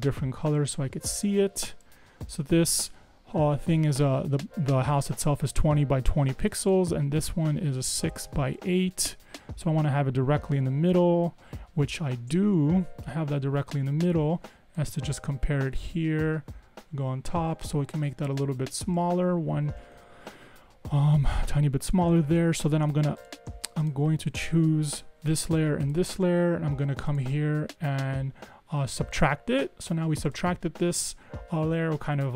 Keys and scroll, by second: 18.2 super+z, 19.5 super+Up, 20.0 Down.